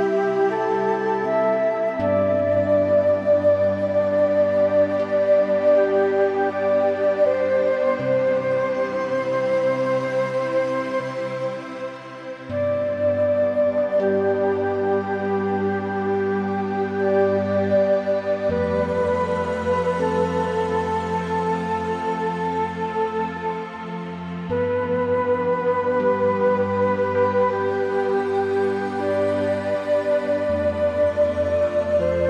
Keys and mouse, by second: 0.9 click, 1.7 Tab, 2.0 click, 2.7 `, 4.5 shift+middle click, 4.9 g, 5.4 z, 6.0 Escape, 6.7 click, 7.2 click, 7.6 g, 8.1 y, 11.6 Tab, 11.7 click, 11.9 middle click, 12.3 Tab, 13.4 middle click, 13.7 shift+middle click, 15.2 middle click, 15.7 shift+middle click, 15.8 middle click, 16.3 shift+middle click, 16.8 shift+middle click, 17.1 middle click, 17.7 middle click, 18.5 middle click, 18.8 middle click, 20.1 Tab, 20.2 click, 21.2 Tab, 21.4 click, 21.7 Tab, 22.0 click, 22.5 Tab, 23.0 middle click, 24.4 click, 24.6 middle click, 25.1 click, 26.4 Escape, 26.8 Tab, 30.1 click, 30.8 click, 31.7 Tab, 32.1 click.